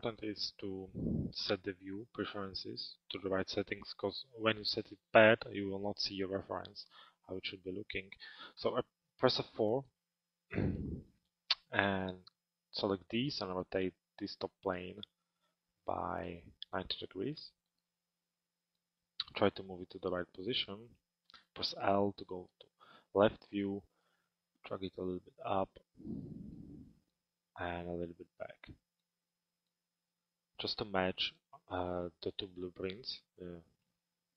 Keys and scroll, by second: 8.2 F4, 20.9 l, 33.5 p.